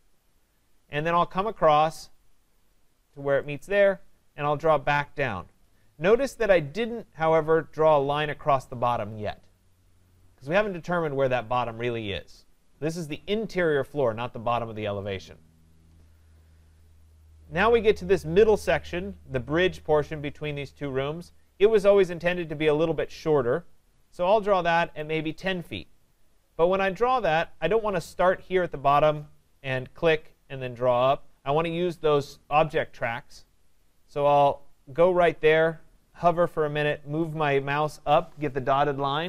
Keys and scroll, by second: 6.4 Return.